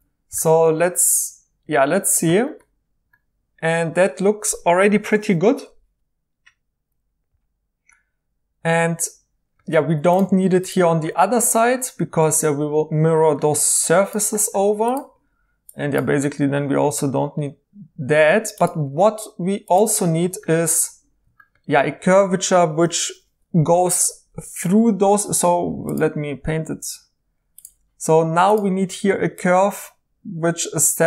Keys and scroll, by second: 9.8 2, 24.7 1.